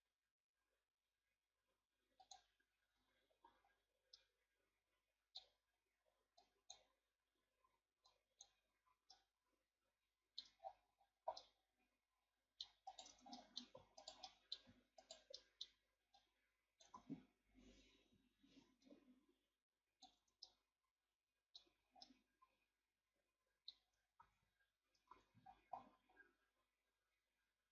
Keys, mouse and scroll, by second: 2.2 click, 3.0 Tab, 3.4 a, 3.7-4.1 scroll down 1, 4.2-6.4 middle drag, 6.4 click, 8.1 click, 9.1-10.6 middle drag, 10.6 scroll down 6, 11.0-11.4 scroll up 1, 11.4-12.9 middle drag, 12.9 right click, 13.1 Tab, 13.4 middle click, 14.0 alt+right click, 14.2 middle click, 15.0 alt+right click, 15.4 middle click, 16.1 click, 16.9 ctrl+z, 18.1 o, 18.8-20.2 drag, 20.2 Tab, 20.4-21.6 middle drag, 21.6 a, 22.0-24.2 middle drag, 24.2 ctrl+s, 25.1 ctrl+s.